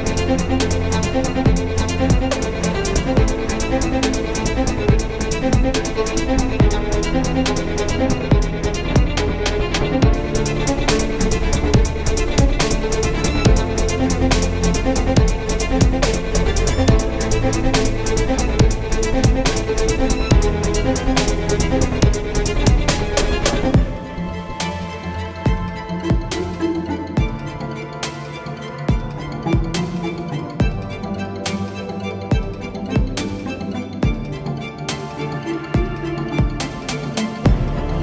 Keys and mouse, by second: 8.8 Tab, 9.2 z, 9.8 Tab, 10.2 z, 11.7 z, 12.3 KP_7, 12.7 Tab, 13.1 z, 13.5 z, 14.3 ctrl+r, 15.9 ctrl+r, 17.4 Tab, 17.8 Tab, 18.1 z, 19.3 ctrl+r, 22.2 ctrl+r, 26.2 ctrl+r, 28.1 Tab, 31.6 Tab, 32.9 ctrl+r.